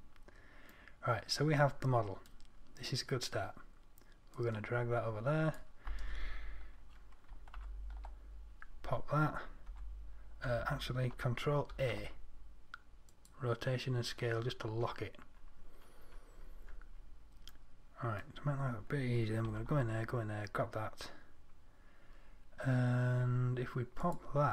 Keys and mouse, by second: 1.1 middle click, 4.6-5.7 drag, 7.8 shift+F10, 10.0 Tab, 10.7 Tab, 12.0 ctrl+a, 19.7 Tab.